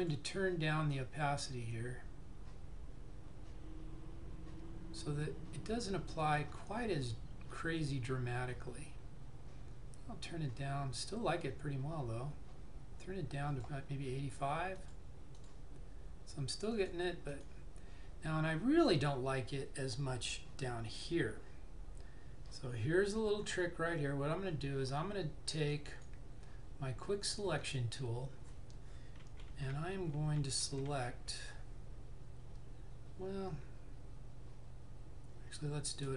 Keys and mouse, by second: 0.1 click, 14.9 click, 25.9 click, 29.4-31.2 typing.